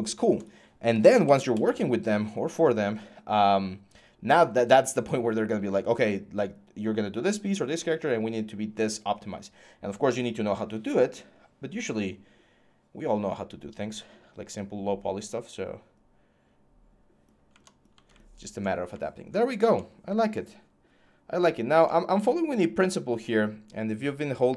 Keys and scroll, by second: 0.5-1.7 typing.